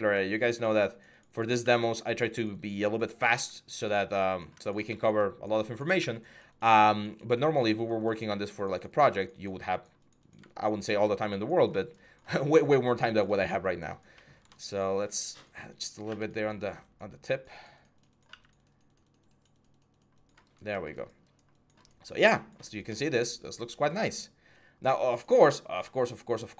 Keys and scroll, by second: 5.8 x, 8.1 x, 15.9 x, 18.1 x.